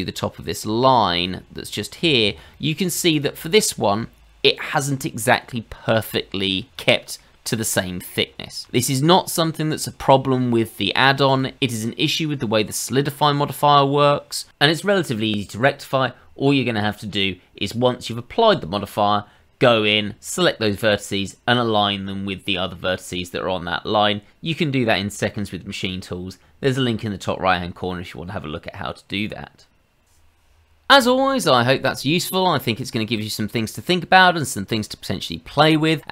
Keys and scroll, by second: 8.6 ctrl+z, 9.1 ctrl+z.